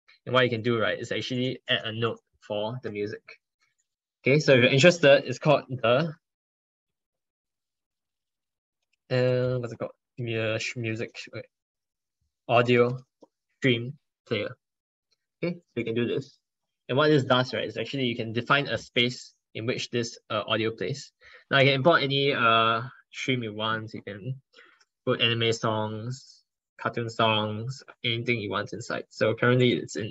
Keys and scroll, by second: 7.8 ctrl+BackSpace, 8.0 ctrl+BackSpace, 11.6 ctrl+BackSpace, 11.8 ctrl+BackSpace.